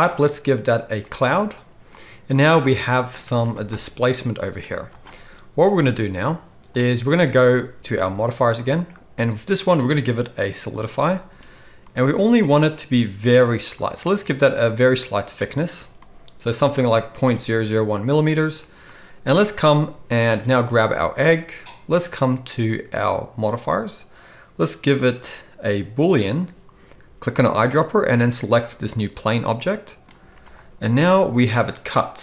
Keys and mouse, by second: 2.1-8.5 middle drag, 3.3 z, 4.6 z, 8.5-9.8 drag, 9.8-20.7 middle drag, 20.7-23.3 right drag, 23.3-27.3 middle drag, 27.3-32.2 right drag, 30.2 z.